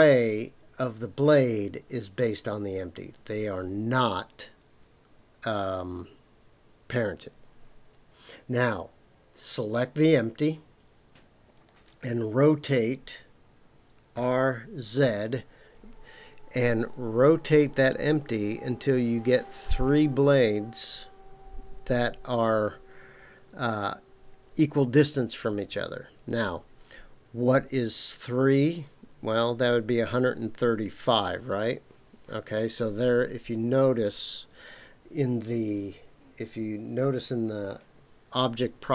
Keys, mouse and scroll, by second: 10.0 click, 14.1 r, 15.0 z.